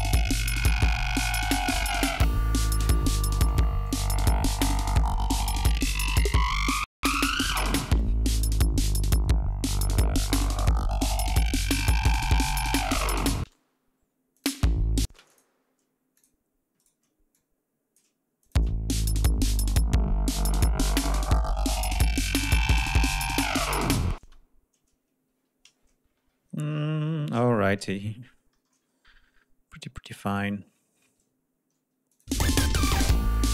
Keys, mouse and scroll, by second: 5.5 ctrl+scroll up 2, 9.3 ctrl+scroll up 2, 10.5 scroll down 2, 13.2 space, 14.2 click, 14.3 space, 15.1 d, 15.1 click, 16.0 click, 16.6 shift+right click, 17.2 shift+click, 18.3 click, 18.4 space, 21.0-21.8 scroll down 4, 21.9-22.5 ctrl+scroll up 4, 24.0 space, 25.5 ctrl+scroll down 2, 27.2 ctrl+s, 31.3 ctrl+scroll down 2, 31.9 ctrl+click, 32.2 ctrl+space, 32.3 ctrl+scroll up 2, 33.1 click.